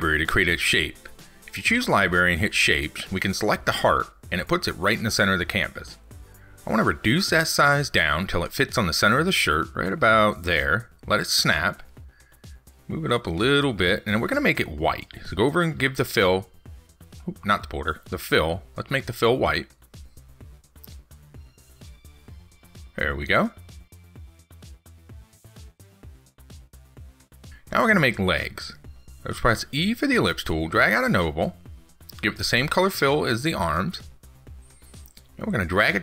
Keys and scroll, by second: 23.5 ctrl+s.